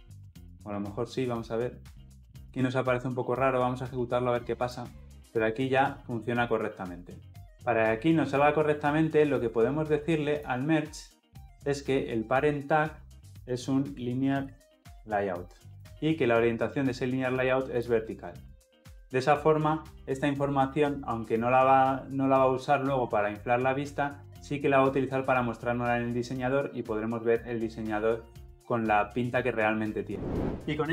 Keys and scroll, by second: 4.4 shift+F10.